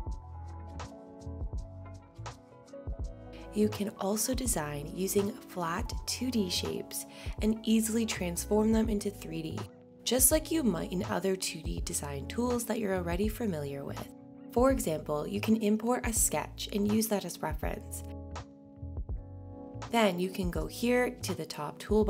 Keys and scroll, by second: 3.2 BackSpace.